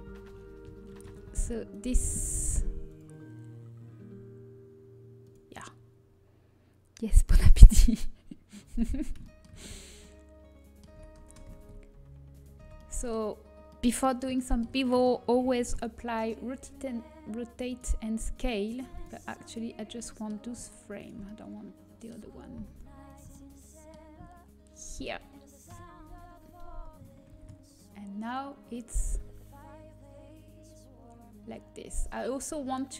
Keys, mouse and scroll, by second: 1.8 ctrl+b, 9.5-10.8 middle drag, 10.8 Tab, 12.0 ctrl+a, 12.7 Tab, 17.0 ctrl+b, 18.9-21.2 drag, 19.4-22.7 right drag, 19.7-25.6 middle drag, 23.0-25.6 right drag, 23.3-24.9 drag, 25.6 KP_7, 25.9 z, 28.3 ctrl+b.